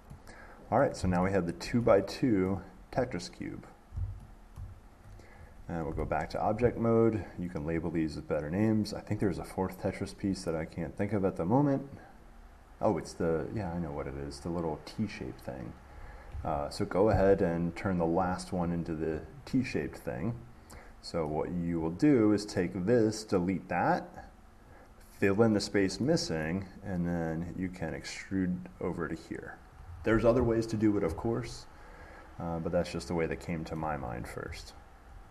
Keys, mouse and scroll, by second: 0.0 click, 1.0 middle click, 1.2 middle click, 2.2 middle click, 2.7 middle click, 3.2 middle click, 3.3 middle click, 4.8 middle click, 6.1 Tab, 8.1 click, 13.9 click, 17.7 click, 18.5 click, 18.9 click, 19.7-21.5 drag, 21.5-24.4 middle drag, 24.4-26.5 drag, 26.7 middle click, 34.0 middle click, 34.0-34.9 scroll, 34.9-35.3 scroll.